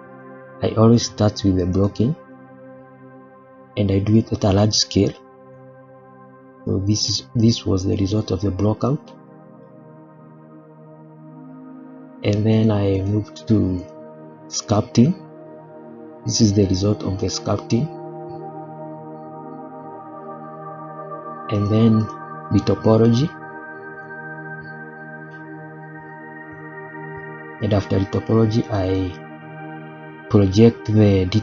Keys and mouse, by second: 0.2 click, 1.8 click, 2.4 click, 4.1-4.6 shift+middle drag, 5.1-5.5 shift+middle drag, 6.6-6.9 shift+middle drag, 7.2-7.9 middle drag, 8.2-9.1 middle drag, 9.3-9.6 middle drag, 10.0-10.4 middle drag, 10.6-11.4 middle drag, 12.5 click, 12.9 click, 14.1 click, 14.8-15.4 middle drag, 15.8-16.4 middle drag, 16.8-17.2 middle drag, 17.6-18.1 middle drag, 18.5-19.4 middle drag, 19.6-20.2 middle drag, 21.5 click, 22.0 click, 22.8-23.1 middle drag, 23.5-24.0 middle drag, 24.3-24.9 middle drag, 25.2-27.3 middle drag, 28.6 click, 29.4 click.